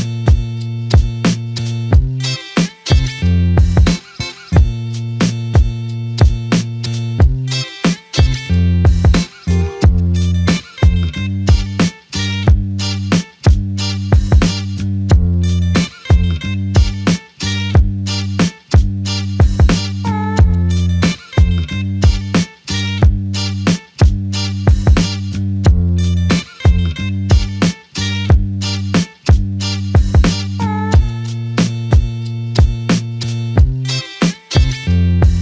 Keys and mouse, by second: 2.0 ctrl+alt+click, 3.2 alt+click, 5.3 typing, 6.6 alt+click, 12.6 double click, 15.2 alt+click, 20.5 typing, 21.8 alt+click, 21.9 alt+double click, 24.9 typing, 26.0 typing, 27.6 typing, 27.8 alt+shift+click, 29.3 typing, 31.9 double click.